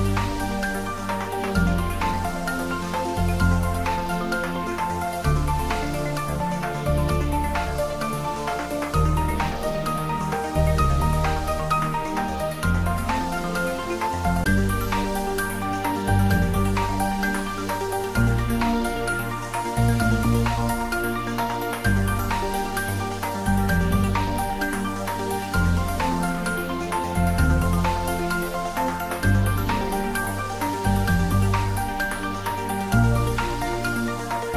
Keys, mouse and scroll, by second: 0.4 click, 8.0 click, 13.2 click, 16.2 click, 32.9 scroll up 1.